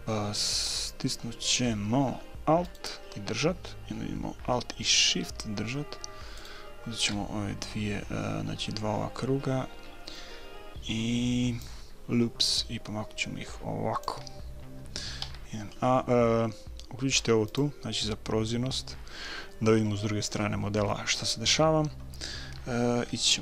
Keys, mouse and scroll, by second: 1.7 middle click, 2.6 right click, 3.2 click, 3.7 right click, 6.4-8.2 right drag, 8.2 middle click, 11.6-13.5 drag, 15.2 a, 17.5-19.4 drag.